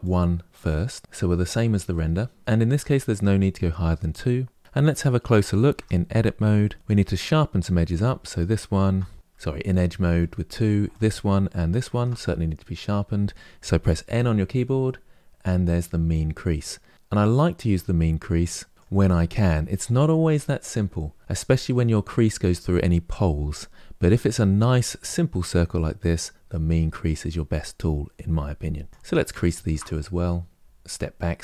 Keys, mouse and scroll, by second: 4.3-5.4 scroll up 3, 5.4 Tab, 6.3-8.0 shift+middle drag, 8.0 alt+click, 9.8 2, 10.6 alt+click, 11.4 alt+shift+click, 13.9 n, 15.8-18.1 drag, 28.5-28.9 scroll up 3, 29.1 alt+shift+click, 30.5 click, 30.5 scroll down 5, 30.6-31.4 middle drag.